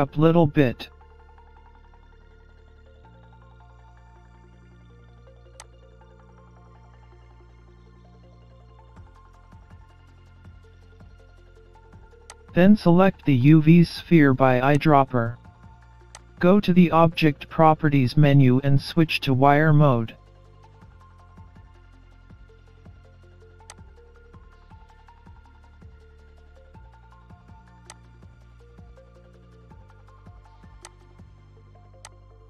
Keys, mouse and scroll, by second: 3.1 s, 6.1-6.9 scroll up 2, 7.2 middle click, 10.1 middle click, 12.3 click, 14.7 click, 21.1 scroll up 1, 23.7 click, 27.9 click, 28.6-29.1 scroll down 1, 29.1-30.3 scroll down 7, 30.9 click.